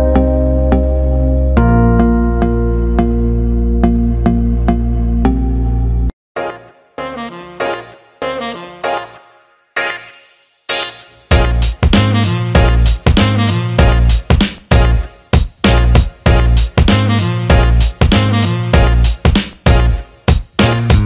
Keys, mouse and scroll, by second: 0.8 middle click, 1.2 middle click, 6.2 l, 8.8 click, 9.0-13.4 drag, 11.0 BackSpace, 15.1 click, 15.8 click, 16.2-16.6 alt+middle drag, 17.1 alt+middle click, 18.0-18.4 alt+middle drag, 19.2 Tab, 19.8 alt+middle click, 20.9 click.